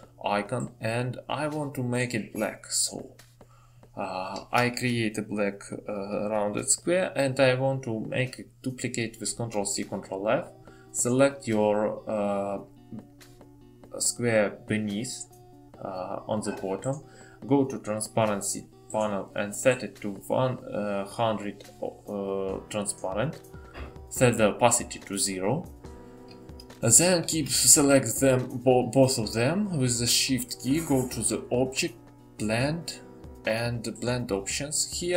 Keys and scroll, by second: 9.0 ctrl+c.